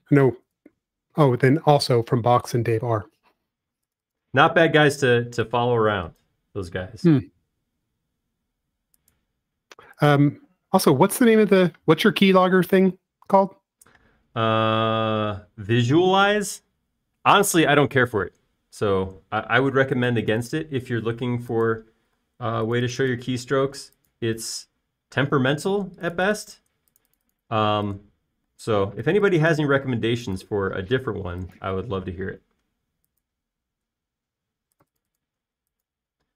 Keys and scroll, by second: 2.9 b, 3.6 space, 23.0-23.7 typing, 25.2-26.0 typing, 29.0 b, 30.0 space, 31.4-32.3 typing.